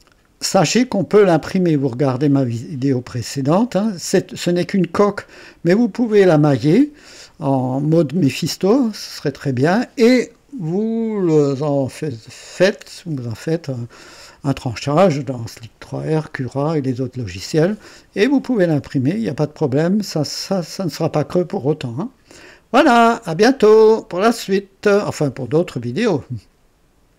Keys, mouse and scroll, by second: 25.7 right click, 27.1 click.